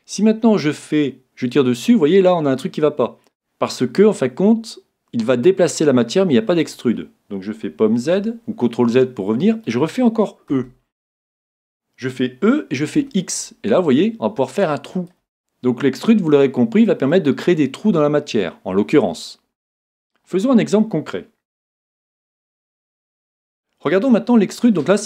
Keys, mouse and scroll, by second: 0.8-2.7 drag, 8.2 super+z, 8.9-10.8 middle drag, 10.5 e, 15.1-17.0 drag, 15.4-17.3 middle drag, 18.0-19.9 middle drag.